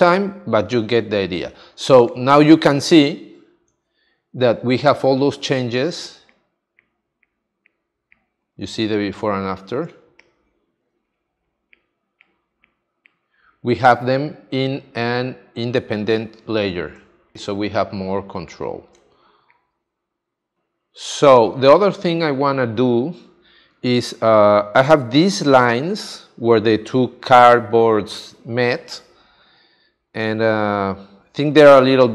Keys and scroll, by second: 3.7 super+d, 9.8 space, 17.0 space, 18.9 space, 30.3 space.